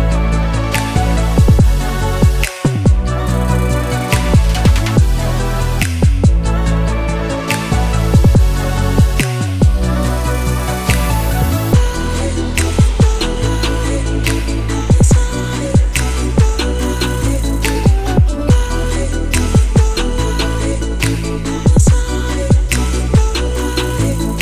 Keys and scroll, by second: 14.1-16.5 typing.